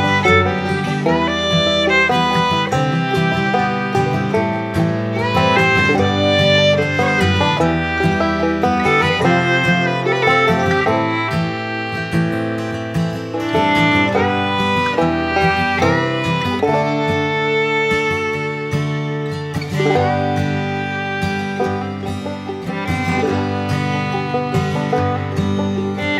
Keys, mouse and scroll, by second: 1.0-3.5 typing, 2.0-4.6 drag, 7.7 click, 11.9 click, 24.4 click, 24.4 click.